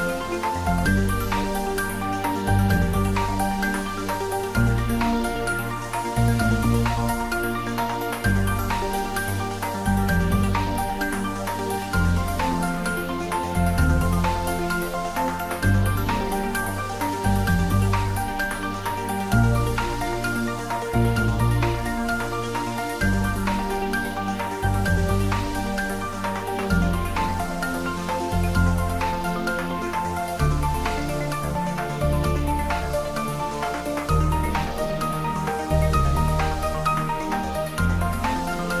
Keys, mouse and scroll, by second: 1.4 click, 2.0 g, 2.3 y, 3.1 Left, 4.3 click, 6.2 scroll up 1, 7.1 r, 8.2 Right, 13.8 Down, 17.0 Up, 17.4 click, 21.6 r, 23.6 Down, 24.1 click, 26.3-27.3 typing, 27.6 Left, 28.2 click, 29.1 g, 29.5 z, 31.0 click, 31.4 scroll down 1, 31.9-35.8 middle drag, 35.8 shift+click, 37.0 middle click, 37.8 shift+click.